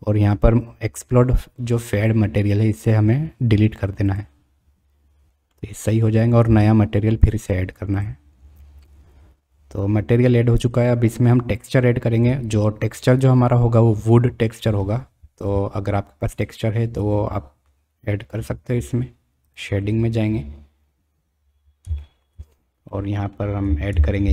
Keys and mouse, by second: 5.5-6.0 middle drag.